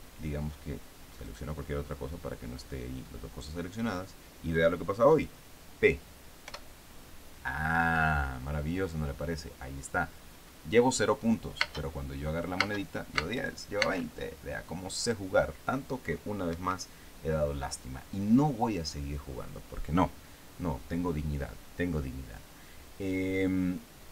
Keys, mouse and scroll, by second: 1.7 right click, 6.9 p, 12.0 space, 13.1 space, 16.9 Escape.